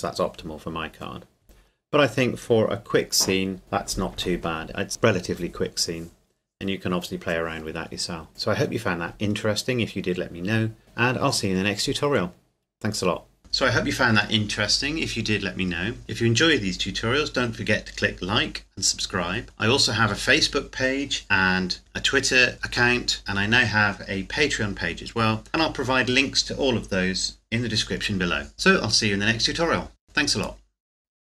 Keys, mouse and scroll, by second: 1.9-3.6 scroll down 1.